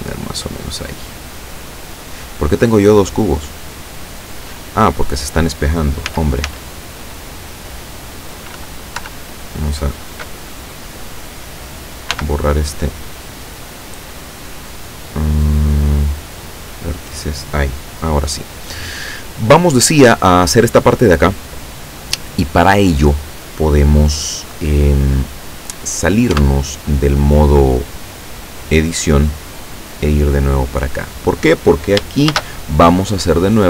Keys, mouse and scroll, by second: 6.2 z, 9.1 l, 12.2 x, 16.2 click, 26.4 Tab, 32.4 shift+a.